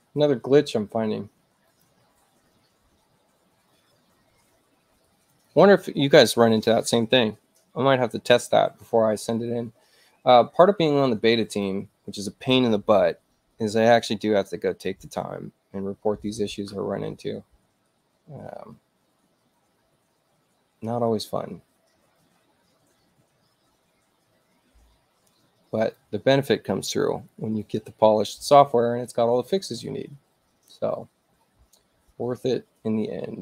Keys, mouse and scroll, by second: 1.7 click, 5.5 click, 11.4 click, 25.8 click.